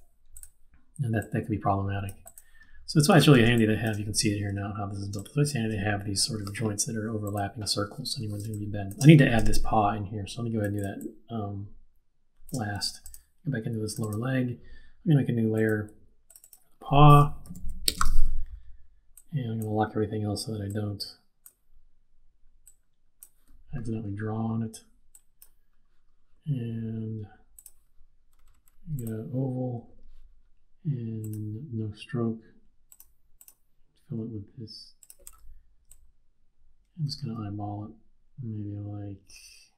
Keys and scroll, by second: 5.2 space, 8.4 space, 17.2-18.3 typing.